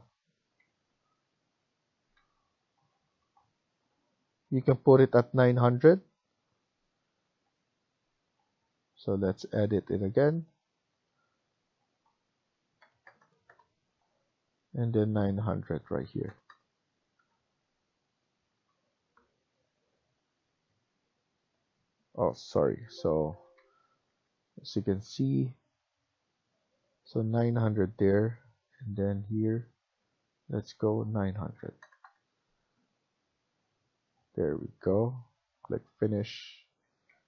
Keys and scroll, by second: 0.5 Escape, 0.9 Escape, 2.1 Escape, 5.1 Right, 6.9 Escape, 7.2 Escape, 12.7 typing, 13.3 Return, 15.6-16.4 typing, 17.1 Return, 22.6 ctrl+z, 23.5 Escape, 24.0 Escape, 31.3-32.2 typing, 32.5 Return, 36.9 Escape.